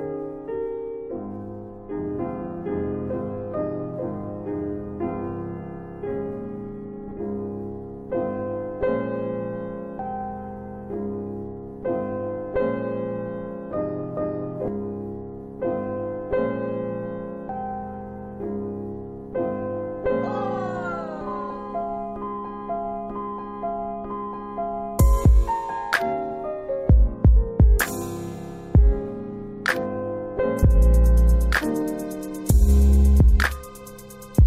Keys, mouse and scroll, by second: 1.6 click, 2.4 space, 3.8 ctrl+a, 5.1 click, 5.3 scroll down 2, 6.7 click, 7.8 middle click, 8.2 space, 9.2 click, 11.5 alt+w, 12.0 alt+w, 12.6 alt+middle click, 13.4-13.8 scroll up 2, 13.8 space, 14.4 middle click, 15.0 space, 18.5 click, 19.9 click, 20.7 alt+middle click, 21.2 space, 23.2 click, 26.4 click, 29.9 shift+click, 30.1 click, 30.3-32.0 scroll down 1, 32.0 scroll down 2, 32.1 click.